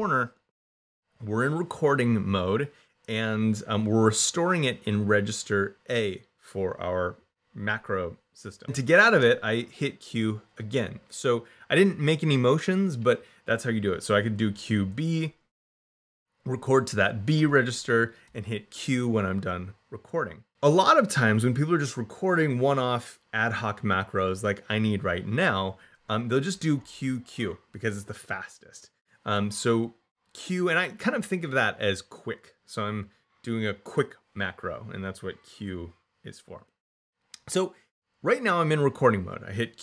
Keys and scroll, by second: 9.1 q, 14.0 q, 14.6 b, 18.1 q, 26.6 q.